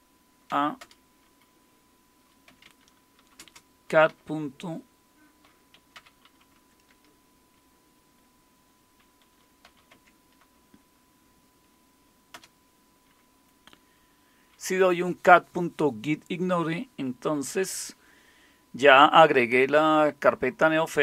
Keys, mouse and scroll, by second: 0.5 typing, 0.8 Return, 2.2-4.1 typing, 5.5-6.7 typing, 9.6 i, 9.9 Tab, 12.3 Return.